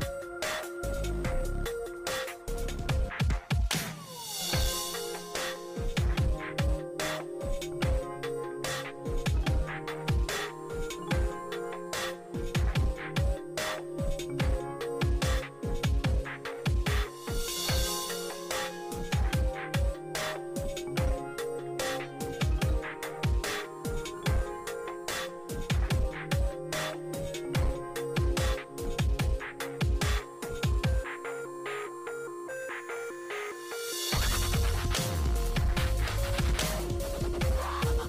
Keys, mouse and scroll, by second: 2.1 6, 3.2 click, 6.6-17.7 drag, 17.5 ctrl+z, 18.2-20.6 drag, 22.0 ctrl+z, 24.0-30.6 ctrl+drag, 32.4 4, 32.7-33.9 drag, 33.9 typing, 35.2 click.